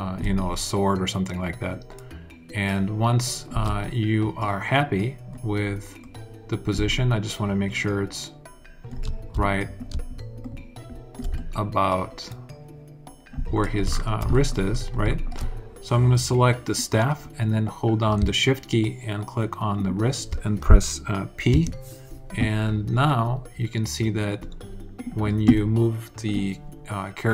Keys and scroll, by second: 21.2 p.